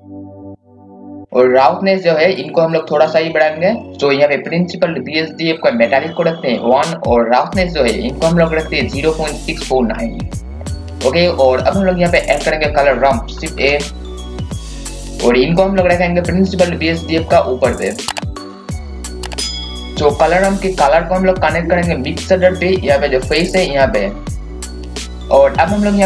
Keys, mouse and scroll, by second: 10.7-11.6 scroll down 1, 11.6-12.0 scroll up 1, 12.1-13.4 scroll down 1, 13.5-14.9 typing, 13.9 click, 14.8-18.8 drag, 18.9-19.3 scroll up 1, 19.3 click, 22.6 scroll up 1, 24.5 click.